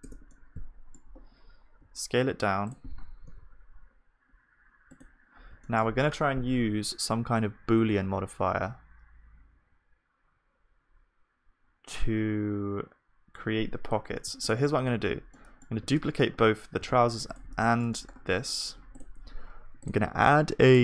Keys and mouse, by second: 15.8 shift+d, 16.4 middle click, 19.0-20.8 drag, 19.0-20.8 middle drag, 19.0 shift+d.